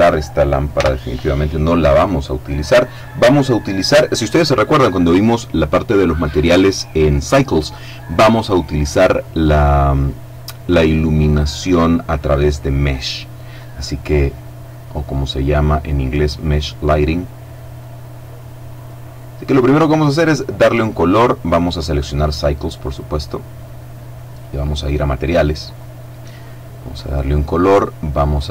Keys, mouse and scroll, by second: 0.5 x, 0.7 click, 14.2 middle click, 15.6 middle click, 16.3-19.1 middle drag, 21.4 click, 22.6 click, 24.1-25.1 middle drag, 25.4 click, 26.7 click.